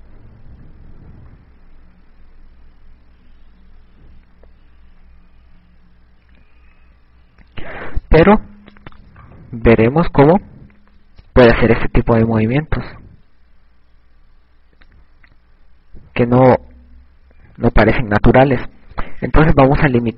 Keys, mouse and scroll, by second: 0.2 click, 1.1 KP_3, 1.8 a, 2.3 ctrl+z, 3.5 ctrl+z, 8.1 a, 10.3 right click, 11.2 g.